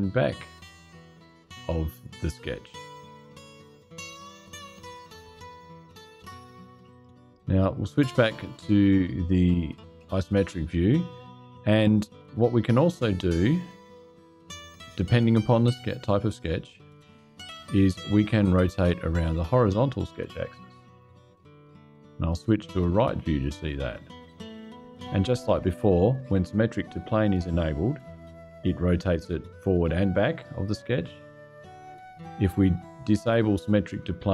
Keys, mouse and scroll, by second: 6.6 click, 16.4 click, 20.1 click, 23.6 click, 32.9 click.